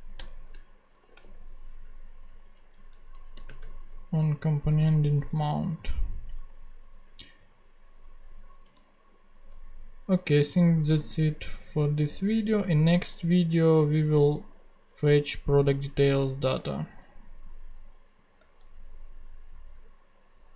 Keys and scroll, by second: 0.1 Return, 0.7-2.2 typing, 2.3 Down, 2.7 Left, 3.3 ,, 3.4 space, 3.6 [, 4.7 super+[, 4.8 super+Right, 5.4 super+;, 6.0 ;, 8.7 super+Tab.